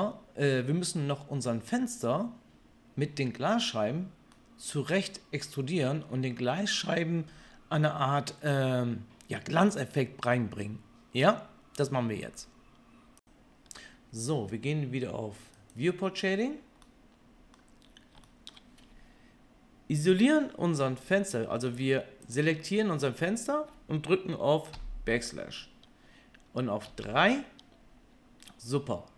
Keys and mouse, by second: 21.8 Tab, 24.7 KP_Divide, 26.9 KP_3.